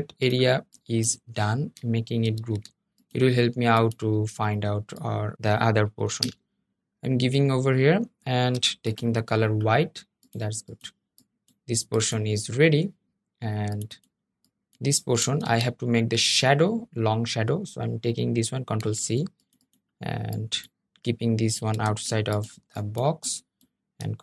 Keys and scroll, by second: 2.1 super+g, 5.9 shift+super+], 15.1 super+z, 18.5 super+c, 21.5 super+z.